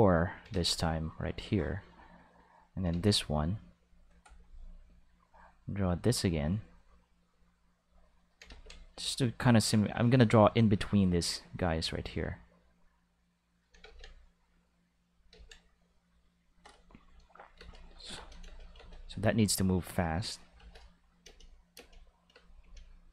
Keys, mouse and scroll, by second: 0.5 ctrl+z, 0.9 click, 1.8 click, 2.9 ctrl+z, 3.3 click, 5.3-6.4 drag, 7.3 click, 8.5 ctrl+z, 8.9 click, 9.8 click, 10.8 click, 12.8 click, 13.8 ctrl+z, 14.2 click, 15.3 ctrl+z, 15.8 click, 17.3 click, 17.5 space, 18.1 space, 18.2 click, 18.4 space, 18.7 space, 18.9 click, 20.1 right click, 20.5-22.6 typing, 21.0 click, 21.9 click, 22.8-23.1 drag.